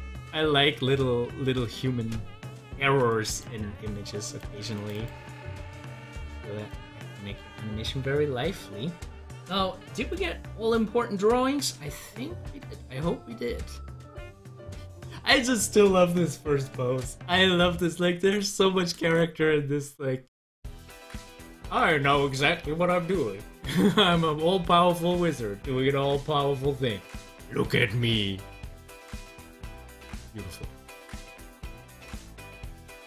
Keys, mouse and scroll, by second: 0.8 middle click, 1.7 scroll up 1, 3.3 double click, 4.2 click, 4.9 double click, 5.6 double click, 6.7 click, 10.1 click, 12.7-14.5 drag, 14.5 scroll down 1, 23.4 scroll down 1, 24.8 middle click, 25.5 scroll up 1, 30.6 scroll down 1, 31.2 middle click, 31.8 scroll up 2, 32.4 middle click, 32.8 scroll up 1.